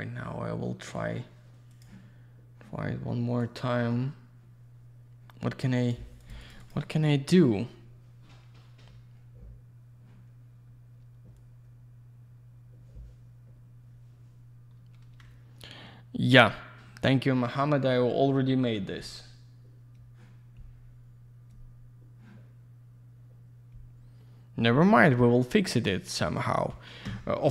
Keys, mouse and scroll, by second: 2.0 click, 3.4 click, 3.6 click, 6.1 click, 6.2 click, 6.3 click, 6.4 click, 6.5 double click, 6.6 click, 6.7 click.